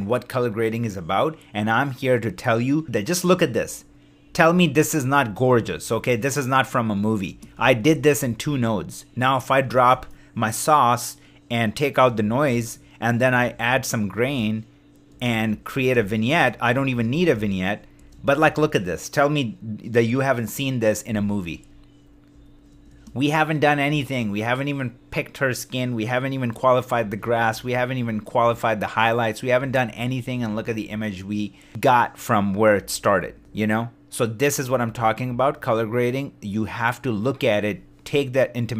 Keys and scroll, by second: 3.6 shift+f, 5.2 shift+d, 5.8 shift+space, 7.6 shift+d, 9.6 shift+d, 12.2 shift+d, 14.2-18.3 typing, 21.7 shift+d, 22.9 shift+space, 23.7 space, 27.2 shift+d, 28.4 shift+space, 29.9 shift+space, 30.3 shift+f, 30.8 shift+d, 32.7-34.8 typing.